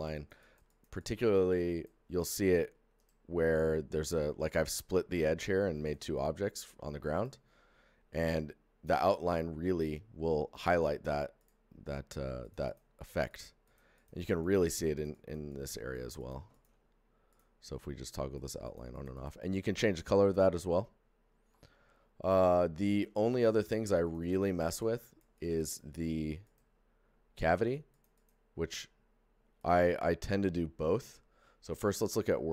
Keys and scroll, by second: 2.7 shift+g, 3.7 g.